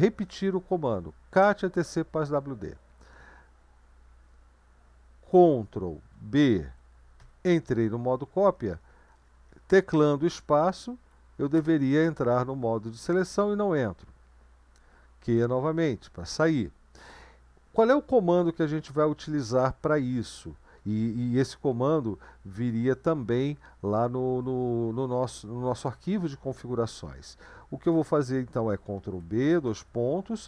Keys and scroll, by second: 0.2 Up, 1.3 Return, 6.5 ctrl+b, 7.2 [, 8.5 Up, 8.7 Up, 8.9 Up, 9.0 Up, 9.2 Up, 10.2 Left, 10.8 Left, 11.0 Left, 11.5 space, 15.4 q, 29.0 ctrl+b, 29.7 :.